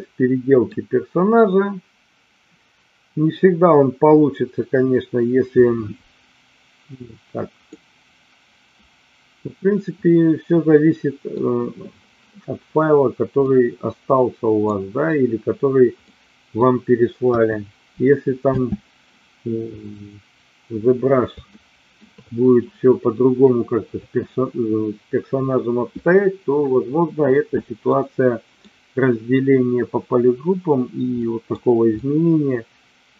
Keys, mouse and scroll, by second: 7.8-11.4 middle drag, 13.4-14.8 middle drag, 16.0 middle click, 17.4 KP_1, 18.6 space, 21.6 shift+middle click, 27.8 middle click, 31.2 middle click, 31.9 scroll up 1, 32.2-33.1 middle drag.